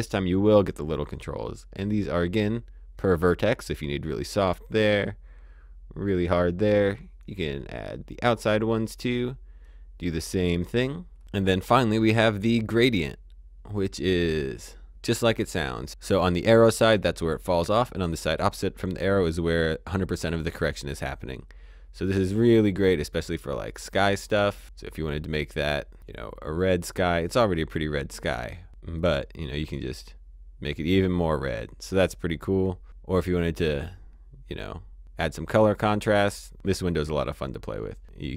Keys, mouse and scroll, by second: 9.6 click, 11.7 click, 13.8 click, 17.2 click, 27.9 click.